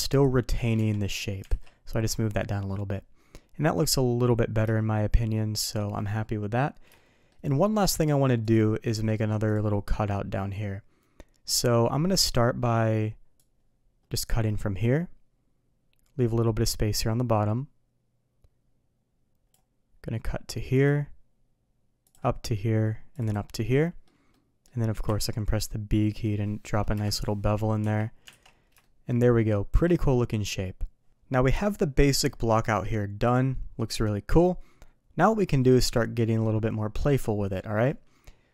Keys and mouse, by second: 0.7 Tab, 1.4 alt+a, 4.7-5.7 shift+middle drag, 6.9-7.2 shift+middle drag, 8.8 d, 13.3-19.5 drag, 23.4-27.1 middle drag, 27.8 KP_3, 28.2 alt+a, 28.8 shift+middle drag, 29.3 shift+middle click, 33.2 click.